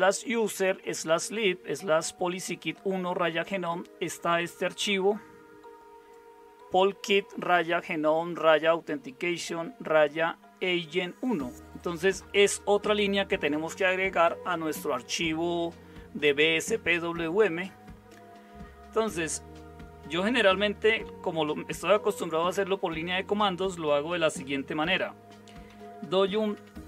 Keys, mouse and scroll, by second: 25.7-26.8 typing.